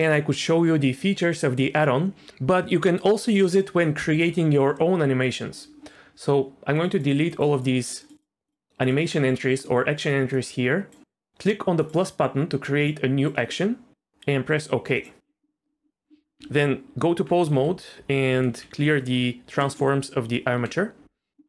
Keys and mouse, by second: 6.7 click, 7.1 click, 7.3 click, 7.5 click, 8.2-10.9 drag, 11.9-15.1 drag, 16.4 Tab, 17.5 a, 18.3 alt+r, 18.5 alt+g, 18.8 alt+s, 19.6 middle click, 20.2 Tab.